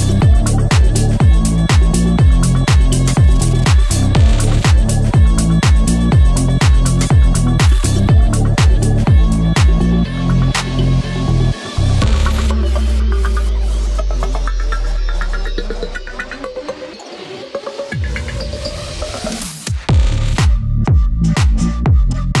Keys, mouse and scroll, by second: 20.4 click.